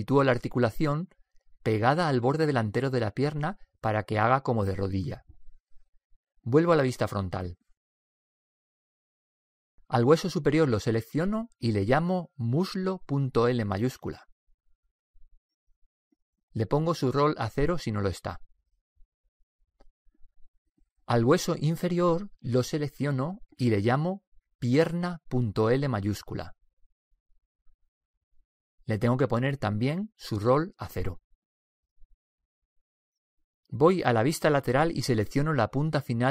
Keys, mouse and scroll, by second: 2.5-4.3 middle drag, 7.7 KP_1, 11.0 right click, 12.2-13.9 drag, 17.0-18.8 drag, 21.9 right click, 22.9-24.8 drag, 29.7-31.3 drag, 35.4 KP_3.